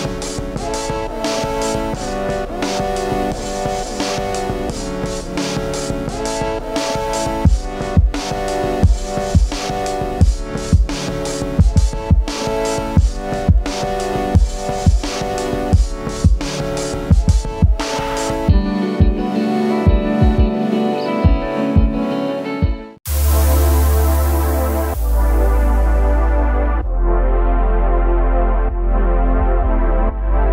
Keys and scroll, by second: 18.1 typing.